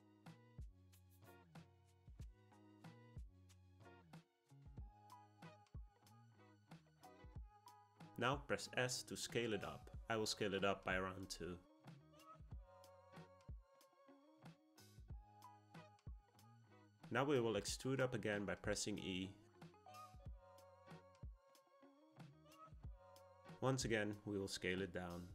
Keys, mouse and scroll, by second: 8.5 s, 16.5 e, 23.1 s.